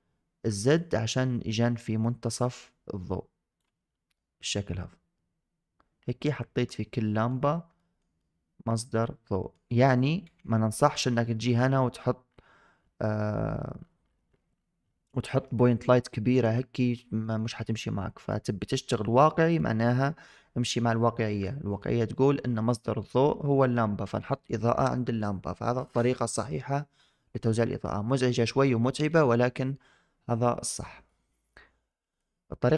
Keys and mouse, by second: 0.6-3.5 drag, 4.1-7.1 middle drag, 7.6 shift+middle drag, 8.1-9.4 middle drag, 11.2 shift+middle click, 15.3 shift+click, 18.2-19.4 drag, 31.3-32.1 drag.